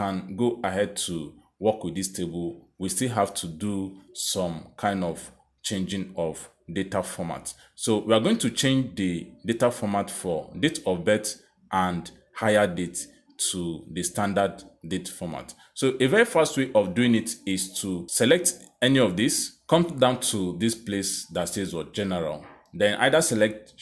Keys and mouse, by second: 2.7 click, 11.3 click, 17.9 click, 23.4 click.